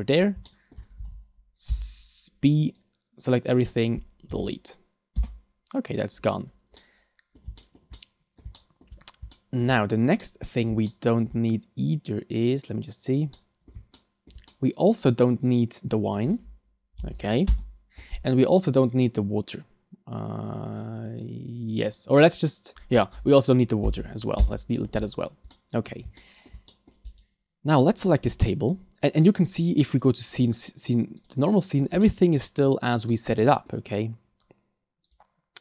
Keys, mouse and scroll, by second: 0.2 scroll down 2, 0.4 shift+middle click, 0.8 scroll down 1, 1.0 a, 1.7 b, 4.3 Delete, 6.8 middle click, 7.6 shift+middle click, 7.9 middle click, 8.5 shift+middle click, 9.0-9.3 scroll up 3, 9.3 shift+middle click, 10.2 middle click, 10.9 shift+middle click, 13.3 middle click, 13.9 shift+middle click, 14.5 middle click, 15.5 right click, 17.0 Delete, 18.6 right click, 23.8 Delete, 25.1-25.5 scroll down 4, 25.5 middle click, 26.2 shift+middle click, 26.7 middle click, 27.2 right click, 29.9 click, 30.5 click, 32.0 middle click, 33.1 middle click, 35.2 click.